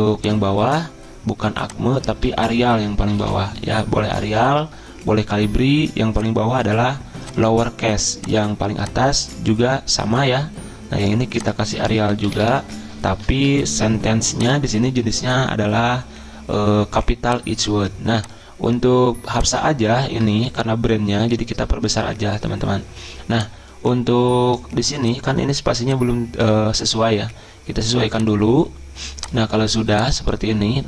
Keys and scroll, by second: 0.6-5.2 typing, 11.6-13.0 typing, 13.3 Return, 20.4 ctrl+], 20.8 ctrl+], 20.9 ctrl+], 20.9 ctrl+], 21.2 ctrl+].